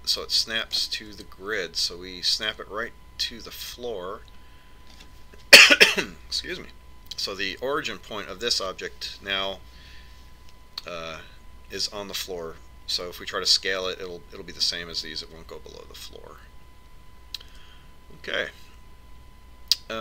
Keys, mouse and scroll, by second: 19.2 Tab.